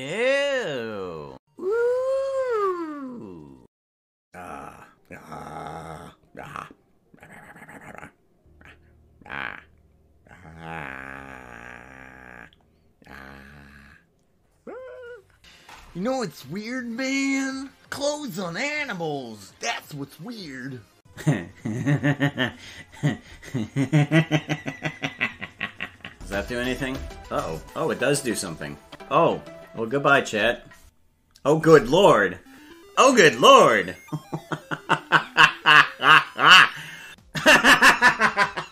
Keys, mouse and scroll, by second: 37.1 click.